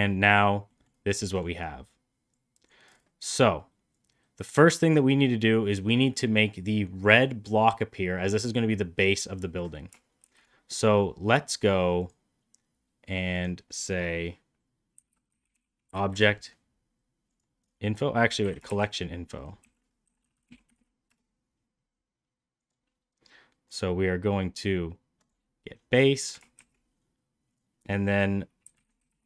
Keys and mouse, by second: 0.6 middle click, 1.2 middle click, 2.2 click, 3.8 click, 10.1 shift+a, 18.3 Delete, 18.6 shift+a, 20.2 l, 23.7-25.2 drag, 26.5 shift+a.